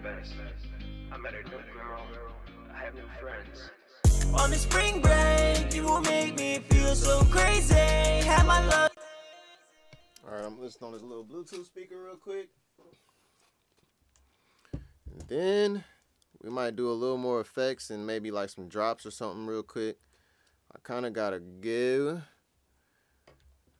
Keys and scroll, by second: 2.8-3.5 typing, 4.3 super+Tab, 5.2 super+Tab, 5.6 super+`.